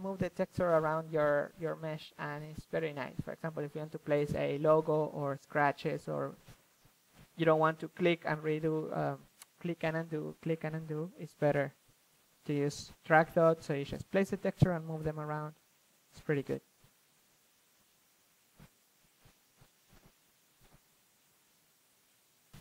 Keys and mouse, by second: 1.4 ctrl+z, 1.9 shift+f, 2.9-4.5 drag, 5.9-7.5 middle drag, 7.1 f, 7.5-9.7 drag, 11.2-11.8 middle drag, 11.8-13.4 drag, 13.4 shift+f, 15.3 ctrl+z, 15.8 ctrl+f, 17.3 f, 18.1-18.7 drag, 19.4-20.4 drag, 20.8-22.2 drag, 22.3-22.6 drag.